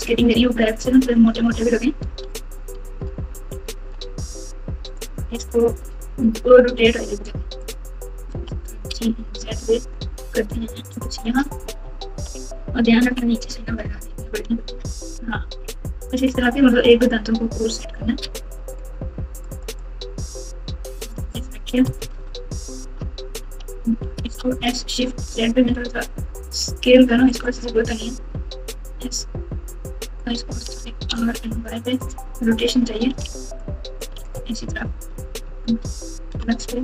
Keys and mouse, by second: 0.5-1.5 ctrl+KP_Add, 2.0 s, 5.3 r, 8.3 g, 11.8 KP_Subtract, 12.1 KP_Subtract, 12.6-13.8 typing, 14.4 KP_Add, 15.1 ctrl+KP_2, 15.7 ctrl+KP_6, 16.2 ctrl+KP_6, 18.1 alt+z, 19.4 click, 19.8-21.1 drag, 22.0-22.9 ctrl+KP_Add, 23.4 alt+z, 24.2 s, 28.3 s, 30.7 r, 33.2 alt+z, 33.8 click, 34.1 alt+z, 34.7 KP_Add, 35.6-36.3 ctrl+KP_Add.